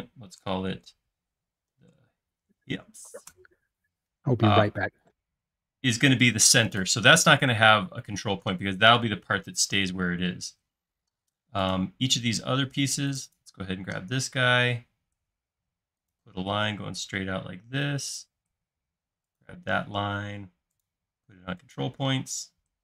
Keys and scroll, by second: 1.8-3.2 typing, 3.5 Return, 14.0 i, 18.6 space.